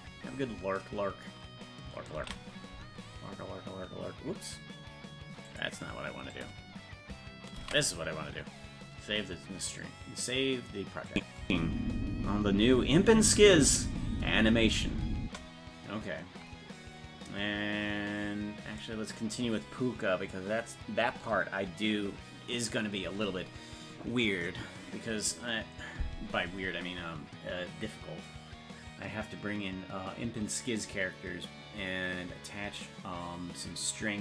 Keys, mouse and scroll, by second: 8.0 ctrl+s, 11.1 click, 11.4 space, 16.1 space.